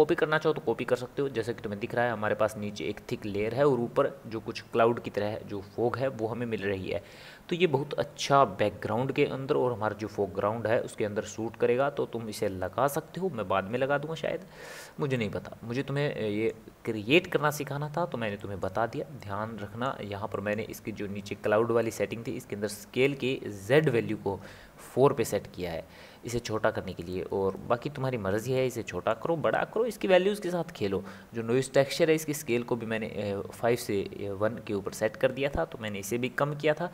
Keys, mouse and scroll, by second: 13.0-15.1 scroll down 5, 15.1-18.3 middle drag, 18.4-20.7 middle drag, 20.7-21.2 scroll up 3, 21.2 scroll down 1, 21.3 scroll up 2, 21.5 scroll down 1, 21.8-24.9 middle drag, 28.5-31.5 middle drag, 36.2-36.9 middle drag.